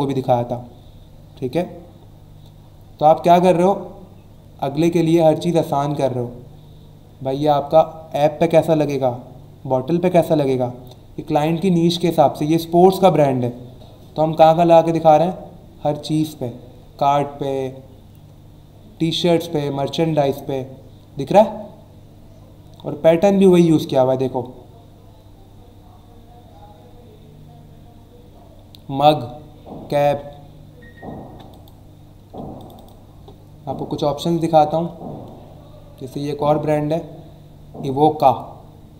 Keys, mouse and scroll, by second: 2.1 scroll down 1, 2.6 scroll down 1, 3.1-5.7 scroll down 6, 10.4 scroll down 1, 10.9 scroll down 1, 11.7 scroll down 1, 14.6-15.1 scroll down 2, 17.9 scroll down 1, 18.5 scroll down 1, 19.3 scroll up 1, 21.7 scroll up 1, 22.2 scroll down 1, 25.9 scroll up 1, 26.6-27.3 scroll down 2, 27.6 scroll down 1, 28.2 scroll down 1, 29.2 scroll down 1, 31.5 click, 32.6 click, 35.0-36.0 ctrl+scroll up 3, 36.7 scroll up 1, 37.2 scroll down 1, 38.5-38.9 scroll down 3.